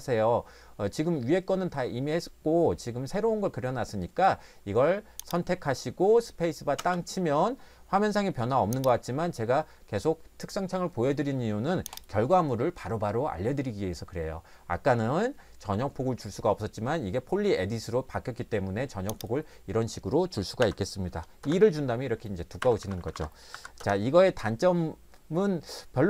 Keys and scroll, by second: 6.8 space, 20.6 2, 21.4 Return, 22.6 Escape, 22.8 Escape, 23.0 Escape, 23.1 Escape, 23.5 l, 23.8 Return.